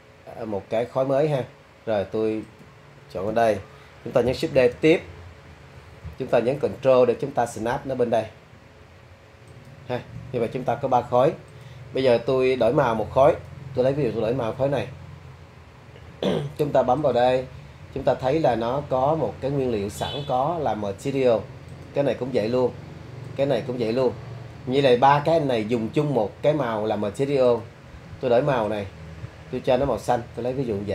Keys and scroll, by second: 4.6 shift+d.